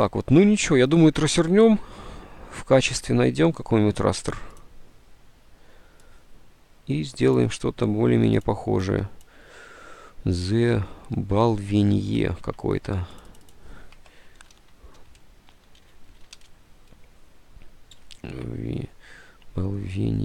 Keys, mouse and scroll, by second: 12.5 alt+Tab, 14.2-16.7 typing, 18.2 alt+Tab, 19.3-20.0 typing.